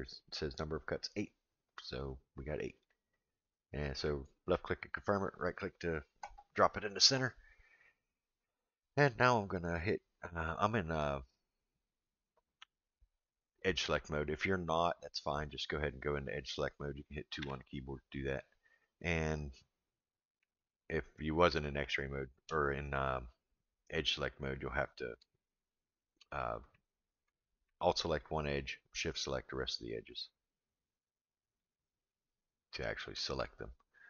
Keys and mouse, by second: 15.4 click, 17.4 2, 20.6 alt+click, 28.1 alt+click, 29.0 alt+shift+click, 29.7 alt+shift+click, 30.9 alt+shift+click, 31.5 alt+shift+click, 32.0 alt+shift+click, 32.7 alt+shift+click.